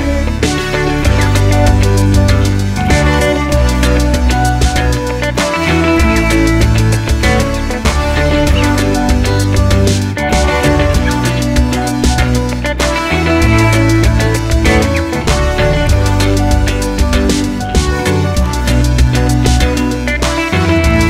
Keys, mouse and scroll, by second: 0.0-0.8 scroll down 2, 0.8-1.4 drag, 1.4-2.9 middle drag, 2.9 click, 4.3-5.7 drag, 7.1 click, 7.6 g, 9.2 shift+Tab, 9.5 g, 11.7 click, 12.2 scroll down 1, 12.6 drag, 13.3 shift+click, 13.6 shift+click, 14.2 ctrl+l, 15.5 click, 15.9 g, 18.4-21.0 middle drag, 19.2 g.